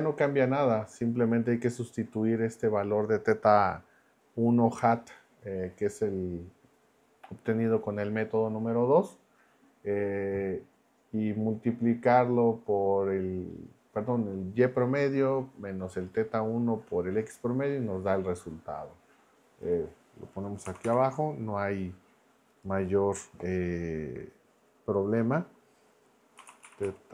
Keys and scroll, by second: 20.7 Escape, 20.8 b, 26.1-27.1 typing.